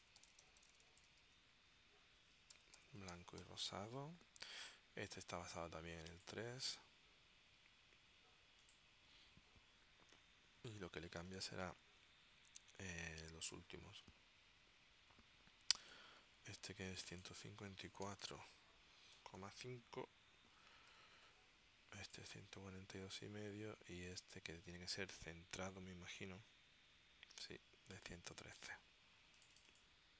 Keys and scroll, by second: 0.0-4.0 typing, 17.8-20.0 typing, 21.1 Tab.